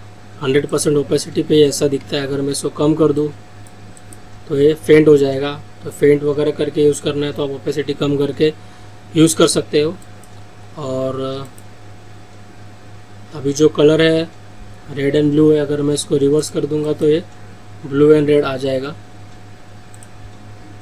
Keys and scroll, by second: 2.1 ctrl+z.